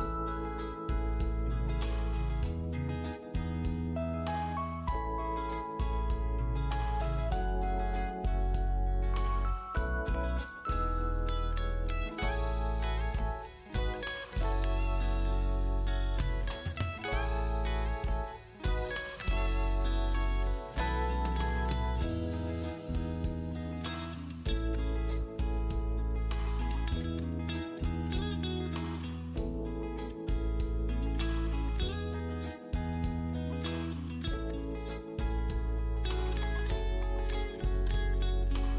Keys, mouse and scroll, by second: 1.7-2.2 scroll up 1, 2.2 click, 3.0 scroll down 1, 3.6 click, 3.8 right click, 6.1 click, 8.7-9.6 scroll up 1, 9.6 click, 11.3 shift+click, 12.5 scroll up 1, 13.2 click, 14.6 click, 18.0-18.6 scroll down 1, 18.6 click, 18.7 scroll down 1, 18.9 click, 19.0 scroll up 1, 19.2 click, 19.9 scroll up 1, 20.1 click, 20.4 scroll down 1, 20.5 click, 20.7 right click, 21.0 click, 21.2-21.5 scroll up 1, 21.5 click, 27.1 scroll up 1, 27.3 click, 27.5 scroll down 1, 27.7 scroll up 1, 27.9 click, 29.3 scroll down 1, 29.4 click, 30.4 right click, 30.7 scroll up 1, 30.8 click, 32.2 scroll down 1, 32.3 click, 33.0 right click, 33.3 click, 33.5 scroll up 1, 33.8 click, 35.2 scroll down 1, 35.3 click, 35.7 right click, 36.0 click.